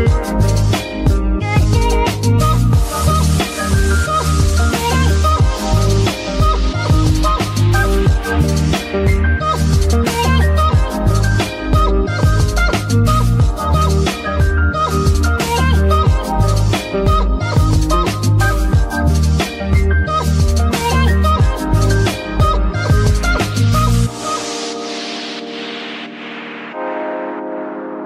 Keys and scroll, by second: 1.6 ctrl+Tab, 3.7 z, 5.8 Escape, 15.1 a, 15.3 z, 18.2 alt+a.